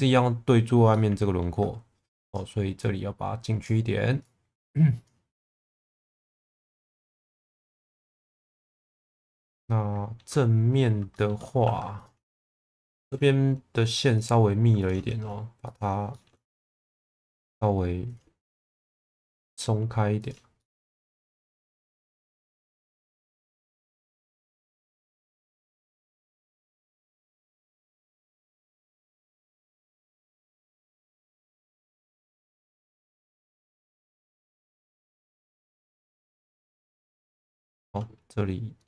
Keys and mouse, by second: 0.9 alt+middle click, 2.0 2, 2.3 click, 2.8 click, 4.2 click, 6.3 middle click, 9.1-10.1 middle drag, 11.1 shift+middle click, 11.6 1, 11.9 click, 13.0 shift+v, 14.1 click, 14.7 click, 15.1 shift+v, 16.1 shift+middle click, 16.7 click, 18.0 click, 18.8 2, 19.0 click, 19.3 shift+v, 20.5 shift+middle click, 22.9 shift+middle click, 23.6 2, 24.5 click, 26.6 shift+middle click, 27.2 1, 27.9 shift+v, 28.6 click, 30.5 click, 30.8 shift+v, 32.9 click, 34.2 click, 34.8 click, 36.0 click, 36.7 click, 37.7 shift+middle click.